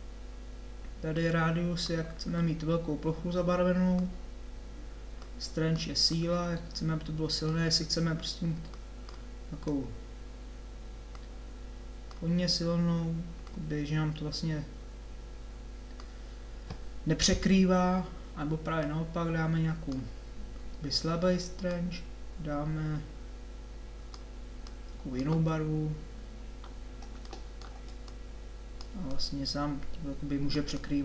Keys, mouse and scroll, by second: 3.4 click, 14.8 click, 28.1-31.0 drag.